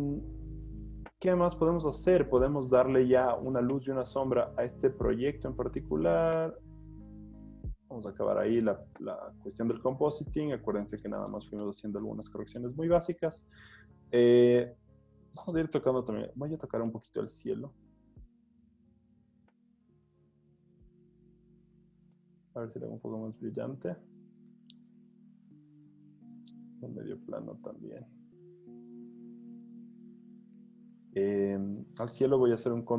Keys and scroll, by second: 1.5 z, 7.4-8.0 typing, 12.1 z, 16.2 super+l, 27.2 super+l, 32.5 super+u.